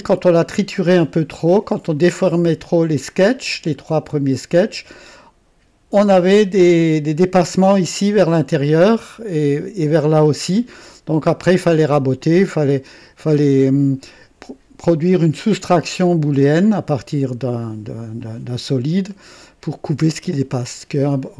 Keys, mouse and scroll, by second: 3.7 scroll up 1, 8.6 click, 10.5-11.8 drag, 12.2 click, 18.2-21.3 drag.